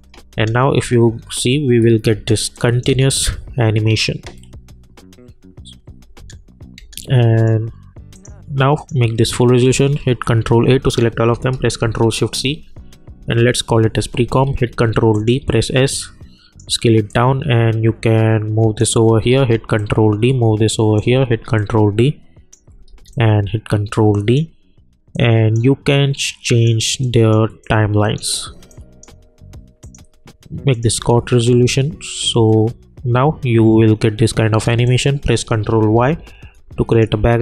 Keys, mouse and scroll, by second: 0.3 space, 2.5 click, 2.9 space, 5.8 space, 7.3 click, 10.0 ctrl+a, 11.8 ctrl+shift+c, 13.1 Return, 14.4 ctrl+d, 15.1 click, 15.4 s, 15.9-19.3 drag, 19.3 ctrl+d, 19.7-21.2 drag, 21.2 ctrl+d, 21.5 click, 22.9 ctrl+d, 23.1-29.8 ctrl+drag, 30.9 space, 34.5 space, 34.8 click, 35.8 ctrl+y, 36.9 click.